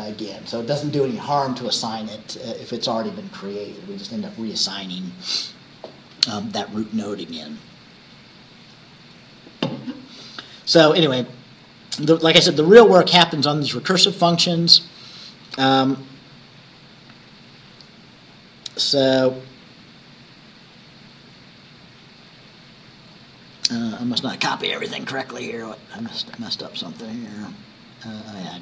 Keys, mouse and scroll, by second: 11.5 scroll up 2, 12.6-13.0 scroll up 2, 14.1 scroll down 2, 15.5-16.4 scroll down 4, 16.6 scroll up 2, 18.9-19.3 scroll up 2, 20.8 scroll down 2, 21.4 scroll down 2, 23.2 scroll up 2, 26.1 click, 26.7-27.4 scroll up 4, 27.6-28.4 scroll up 2, 28.5 click.